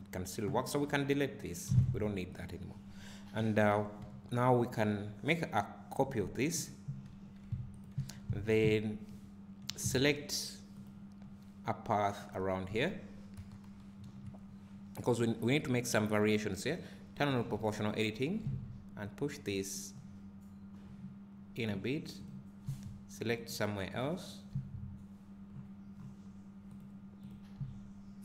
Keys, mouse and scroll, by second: 0.9 click, 1.9 x, 2.4 click, 3.6 KP_3, 4.0 KP_1, 7.1 shift+d, 7.7-8.1 drag, 8.1 Tab, 8.6 `, 10.9 click, 17.4 o, 18.5 g, 22.3 click, 22.7 g, 24.0 click, 24.6 g, 27.3 click, 27.6 g.